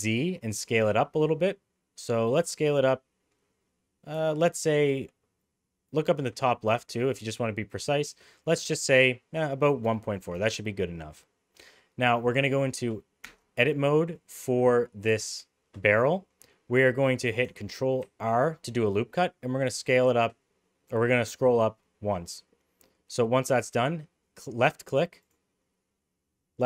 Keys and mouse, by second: 11.1 middle click, 13.3 Tab, 18.0 ctrl+r.